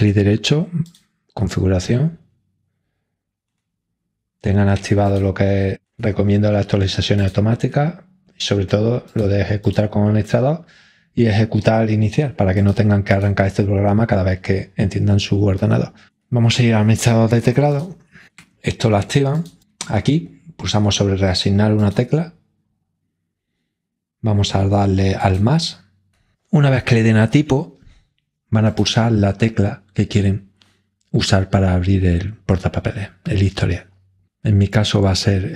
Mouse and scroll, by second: 0.4 right click, 0.8 click, 5.0 click, 7.1-8.1 drag, 9.0-10.6 drag, 12.5-14.0 drag, 17.7 click, 19.3 click, 21.8-22.7 drag, 25.2 click.